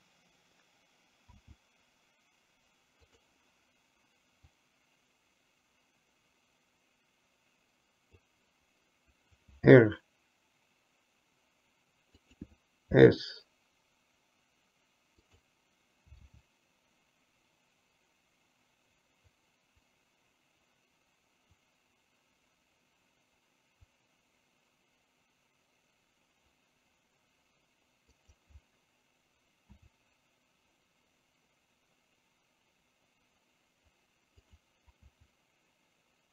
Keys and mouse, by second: 1.6 s, 4.8-8.4 drag, 9.6 r, 13.1 s, 16.3 r, 29.8 s, 35.2 s.